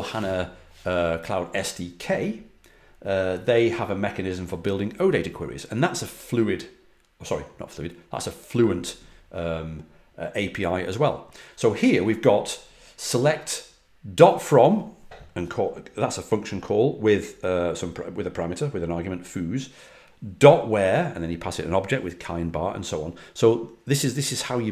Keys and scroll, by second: 21.3 typing.